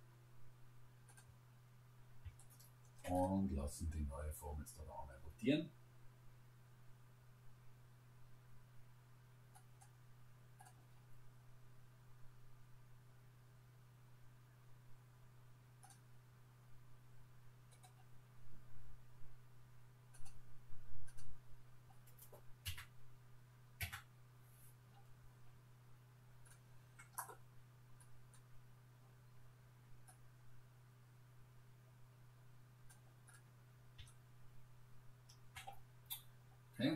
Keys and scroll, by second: 22.7 Return.